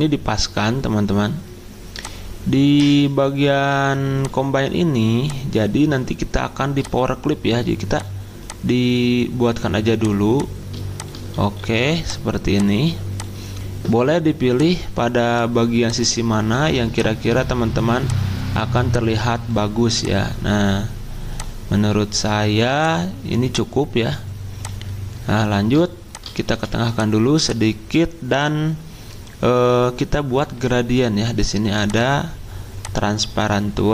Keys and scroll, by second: 11.6 c, 26.5 c.